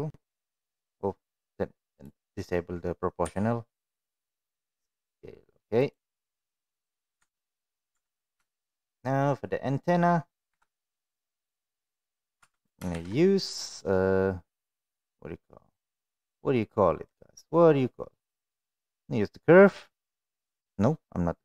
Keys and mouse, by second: 1.9 click, 3.2 s, 6.3 middle click, 7.2 Tab, 7.3 middle click, 7.9 Tab, 8.4 shift+middle click, 9.4 middle click, 10.4 KP_1, 12.3 Tab, 12.8 shift+a.